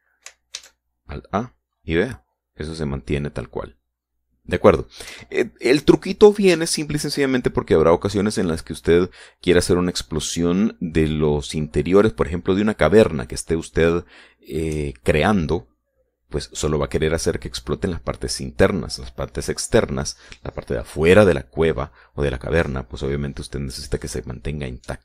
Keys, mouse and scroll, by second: 0.3-0.7 scroll down 2, 1.4 alt+a, 5.9 Escape.